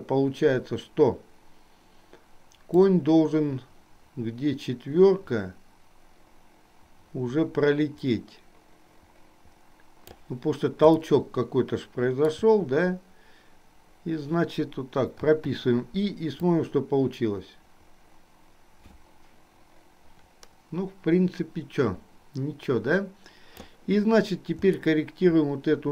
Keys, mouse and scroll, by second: 2.9-10.5 drag, 11.3-12.5 shift+middle drag, 16.9-23.8 drag, 25.0-25.9 shift+middle drag.